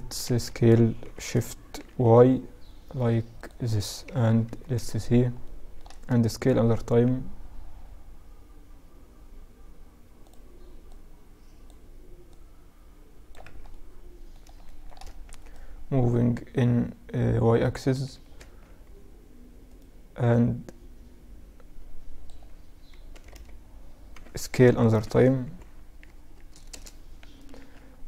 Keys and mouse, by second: 0.2 s, 3.4 KP_Add, 3.6 KP_Add, 4.6-7.9 middle drag, 5.6 s, 10.0-12.9 drag, 12.6 z, 12.9-14.6 middle drag, 14.6-16.4 drag, 17.5 Tab, 18.8 click, 19.4-20.7 middle drag, 20.7 click, 22.2 a, 22.5 a, 23.2 s, 26.6 Tab, 27.5-28.0 middle drag.